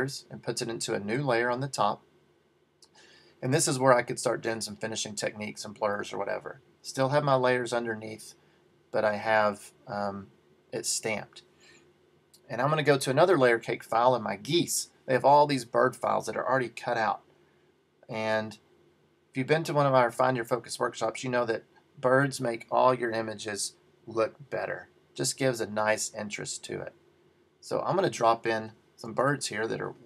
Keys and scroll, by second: 29.2 super+t.